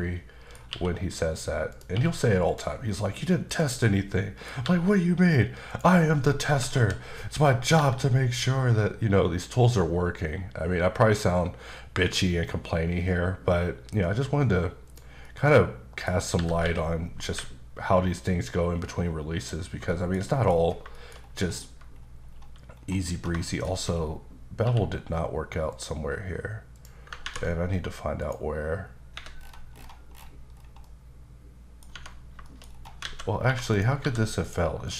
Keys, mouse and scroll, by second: 0.7 q, 1.7 click, 1.9 q, 2.5 click, 3.1-3.5 scroll down 1, 3.5 click, 3.8 middle click, 4.6 g, 5.7 click, 6.7 KP_7, 7.8 g, 14.9 click, 15.2 middle click, 16.3 scroll up 1, 16.4-17.3 typing, 19.4 click, 19.9 shift+middle click, 20.6 scroll up 2, 20.9 shift+middle click, 21.2-24.6 scroll up 15, 23.5 shift+middle click, 24.6 q, 25.7 click, 26.8 click, 28.2 click, 29.2 Escape, 29.4-30.6 scroll down 10, 30.8 middle click, 31.9 Tab, 32.5 shift+middle click, 32.7 scroll up 3, 33.0 alt+a, 33.7 click, 34.0 g, 34.4 right click, 34.9 click.